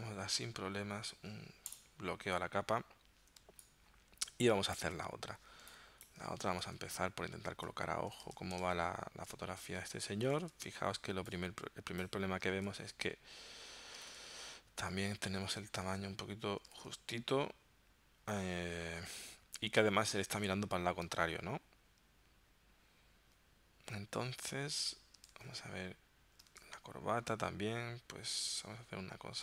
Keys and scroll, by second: 3.6 space, 6.7 super+Tab, 8.4 super+Tab, 10.5 super+Tab, 12.6 super+Tab, 14.1 super+Tab, 15.9 super+Tab, 16.8 super+Tab, 25.4 super+Tab, 26.6 super+Tab.